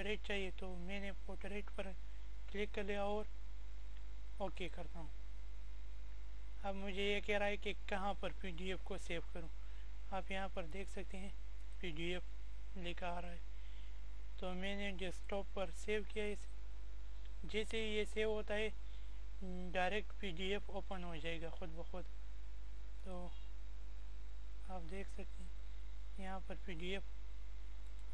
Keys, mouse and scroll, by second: 0.8 click, 6.9 click, 11.6 click, 11.8 click, 19.4 click, 24.0 click, 26.8 click.